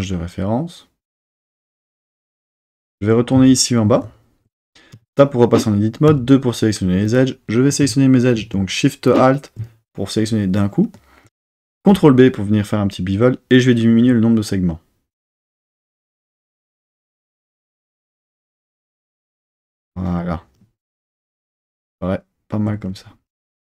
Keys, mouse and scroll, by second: 4.9 Tab, 6.1 2, 7.0 click, 9.1 alt+shift+click, 11.9 super+b, 19.7 click, 21.0 Tab.